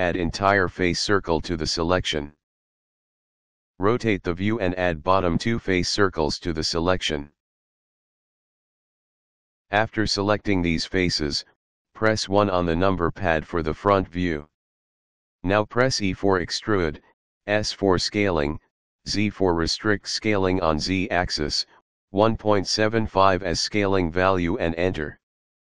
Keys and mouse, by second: 0.6 alt+shift+click, 3.7 middle click, 5.9 alt+shift+click, 7.7 alt+shift+click, 11.5 KP_1, 16.5 e, 17.1 s, 17.7 z, 22.6 KP_1, 23.1 KP_Decimal, 23.3 KP_7, 23.6 KP_5, 24.7 Return.